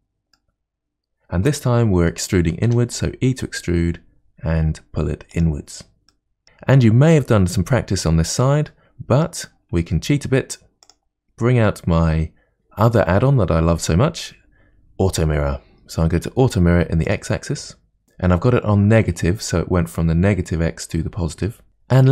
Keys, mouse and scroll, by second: 0.3-2.7 middle drag, 2.7 e, 6.1-10.9 middle drag, 10.9-12.5 drag, 14.2 click, 17.1 click, 18.0 click, 21.5-22.1 middle drag.